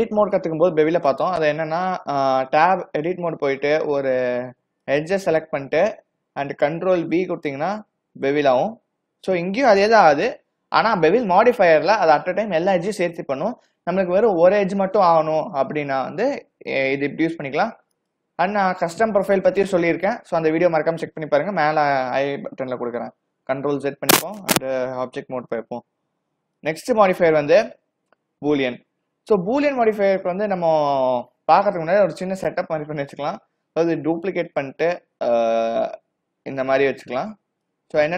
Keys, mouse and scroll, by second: 1.0 click, 2.8 Tab, 4.5 2, 4.9 click, 7.3 ctrl+b, 23.1 ctrl+z, 24.6 Tab, 25.5-26.0 scroll down 6, 26.7 click, 30.2-30.7 scroll up 4, 30.7-33.6 scroll down 4, 34.3 shift+d, 37.7 click.